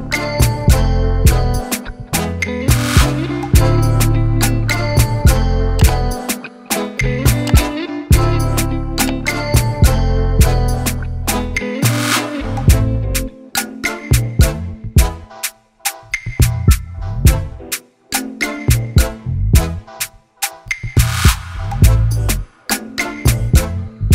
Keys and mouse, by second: 2.5 click, 3.2 ctrl+t, 4.6 click, 6.6 click, 9.2 Down, 9.7 Return, 12.8 click, 13.6 click, 14.1-19.5 typing, 21.0 click, 22.7 click, 23.3-24.1 typing.